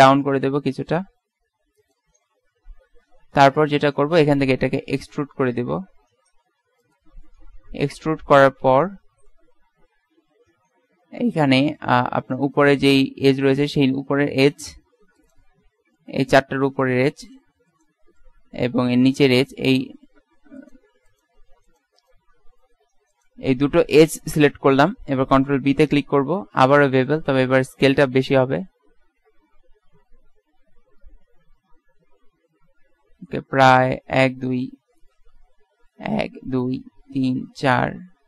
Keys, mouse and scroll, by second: 2.7 KP_1, 4.8 e, 7.3 middle click, 9.4 z, 10.1 z, 12.3 click, 12.8 z, 15.8 z, 23.7 z, 24.1 z, 26.2 ctrl+b.